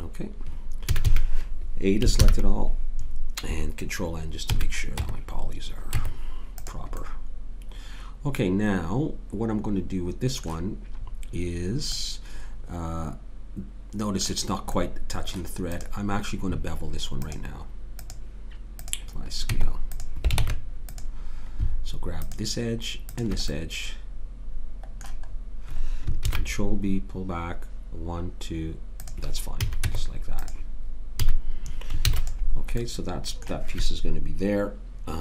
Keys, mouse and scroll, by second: 0.9 a, 1.1 a, 2.2 ctrl+n, 4.4 a, 5.0 Tab, 5.9 Tab, 11.0-12.2 middle drag, 15.7 click, 16.6 right click, 18.9 click, 19.5 Tab, 20.4 ctrl+Tab, 22.2 click, 26.2 ctrl+b, 29.6 a, 29.8 Tab, 31.2 a, 32.1 ctrl+s.